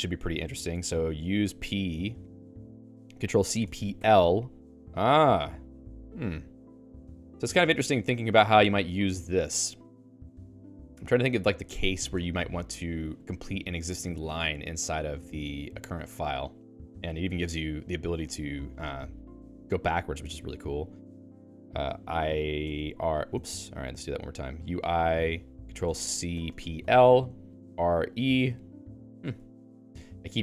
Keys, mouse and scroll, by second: 0.0-2.6 typing, 0.6 Return, 8.0 Down, 8.4 Down, 9.1 Up, 9.8 Up, 15.6 BackSpace, 15.9 BackSpace, 16.1 BackSpace, 16.7 BackSpace, 22.1-25.2 typing, 28.2 e, 28.6 ctrl+j, 28.8 ctrl+j, 29.4-30.4 typing.